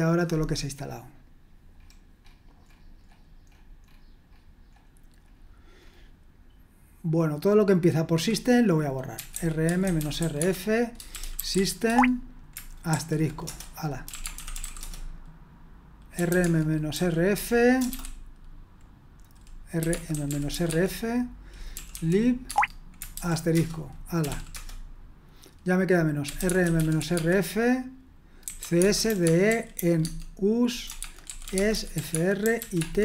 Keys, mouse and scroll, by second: 8.9-18.3 typing, 19.6-24.8 typing, 26.0-33.0 typing.